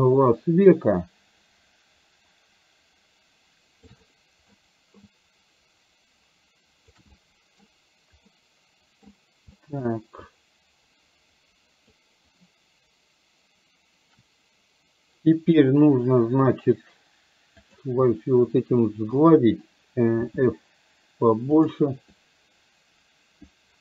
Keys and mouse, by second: 4.1 middle click, 5.2-7.0 ctrl+drag, 7.1 middle click, 8.5 middle click, 9.7 middle click, 10.3-12.1 drag, 17.6 click, 18.8 middle click, 20.2 f, 22.2-23.8 drag.